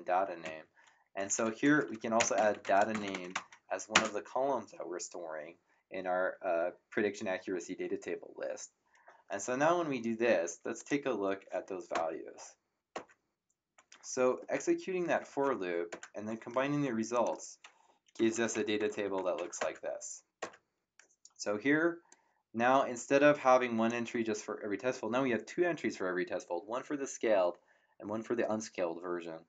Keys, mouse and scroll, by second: 0.4 Down, 2.0-3.9 typing, 10.7 click, 11.9 ctrl+KP_Enter, 15.9 ctrl+KP_Enter, 17.1 click, 18.0-19.9 typing, 22.1 click.